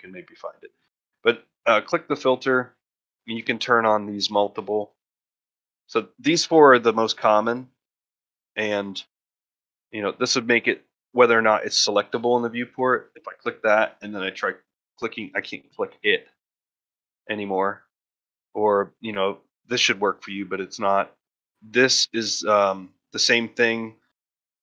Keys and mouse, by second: 0.5-9.1 drag, 13.8 click, 15.8-16.4 drag, 16.6 click, 18.2 click, 18.8 click, 20.3 click, 21.6 click, 22.1 click, 23.1 click, 23.4 click.